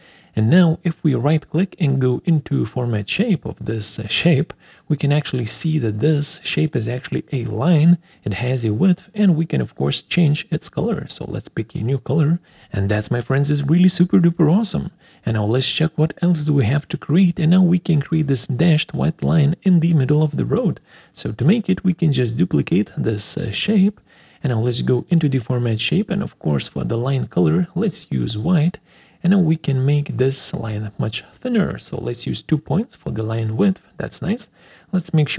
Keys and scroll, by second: 33.8 2.